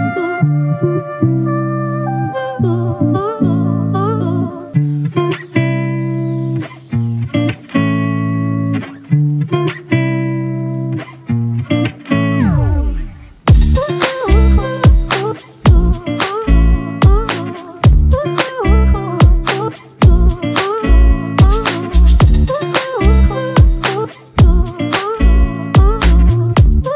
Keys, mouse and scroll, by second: 11.8 ctrl+click, 12.2 right click, 18.6 ctrl+t, 20.6 ctrl+-, 20.9 ctrl+-, 21.9 alt+shift+click.